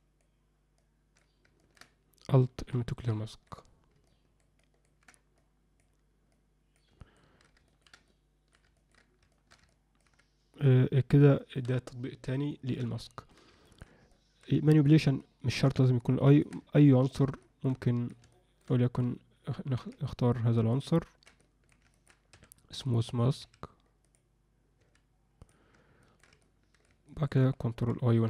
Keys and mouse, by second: 0.8 click, 1.6 ctrl+alt+middle click, 2.7 alt+m, 3.3 ctrl+alt+middle click, 4.1 ctrl+alt+middle click, 4.6 ctrl+alt+middle click, 5.4 click, 6.3 click, 7.0 ctrl+alt+middle click, 7.7 ctrl+alt+middle click, 8.1 alt+middle click, 8.7 ctrl+middle click, 9.3 alt+shift+middle click, 9.7 ctrl+alt+middle click, 10.6 click, 11.3 ctrl+middle click, 12.5 ctrl+middle click, 13.0 middle click, 13.6 ctrl+middle click, 14.1 alt+middle click, 14.7 alt+shift+middle click, 15.2 ctrl+alt+middle click, 16.3 ctrl+alt+middle click, 16.7 middle click, 17.4 shift+middle click, 17.9 alt+middle click, 18.3 alt+shift+middle click, 18.7 middle click, 19.8 b, 21.4 alt+middle click, 21.9 ctrl+alt+middle click, 22.4 a, 26.0 ctrl+middle click, 26.4 middle click, 27.1 ctrl+alt+middle click.